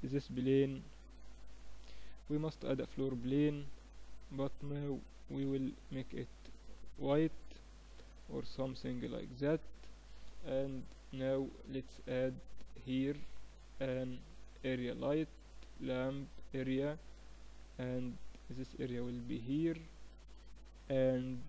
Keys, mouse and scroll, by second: 0.2-2.1 drag, 2.1-3.8 middle drag, 3.8 click, 6.1 click, 6.9-10.1 middle drag, 10.1 click, 10.1 KP_3, 12.0-13.8 drag, 12.7 shift+a, 16.9 r, 21.3-21.4 drag.